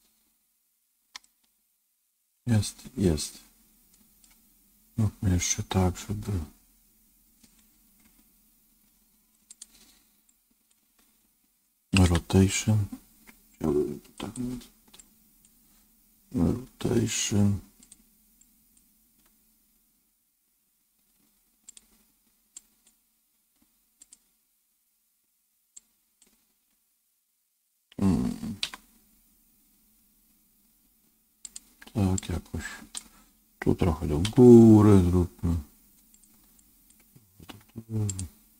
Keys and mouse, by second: 1.1-4.1 middle drag, 8.4 KP_1, 9.4 click, 10.3 click, 12.0 r, 15.0-16.4 drag, 16.4 r, 18.5 click, 18.9 r, 22.4 click, 23.3 r, 25.7 click, 26.5 r, 32.1-34.2 drag, 34.2 g, 36.5 click, 37.4 g.